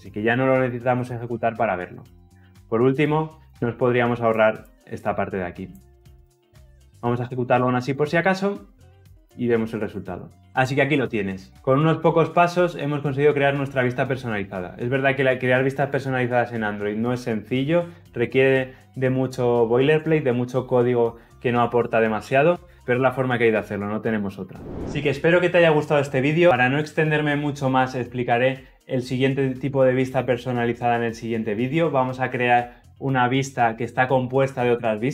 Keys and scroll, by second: 7.0 shift+F10.